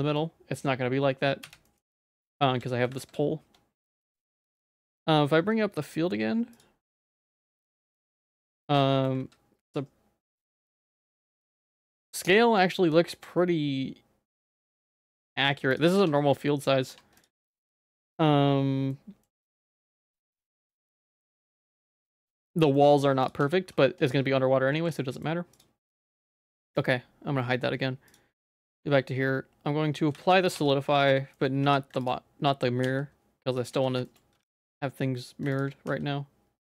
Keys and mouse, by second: 0.2 middle click, 1.4 /, 1.6 middle click, 3.0 ctrl+s, 6.6 click, 7.0 middle click, 7.6 middle click, 8.8 middle click, 9.3 ctrl+s, 12.0 middle click, 16.0 Tab, 16.9 Tab, 17.8 ctrl+s, 18.9 middle click, 20.2 middle click, 20.8 middle click, 21.4 middle click, 21.7 shift+middle click, 22.4 middle click, 23.4 Tab, 23.8 Tab, 24.8 ctrl+s, 25.0 middle click, 28.1 click, 28.4 click, 30.2 ctrl+a, 30.6 Tab, 30.7 middle click, 31.1 z, 31.4 middle click, 31.6 3, 32.0 alt+click, 32.8 x, 33.7 z, 34.1 shift+middle click, 34.4 2, 35.9 z.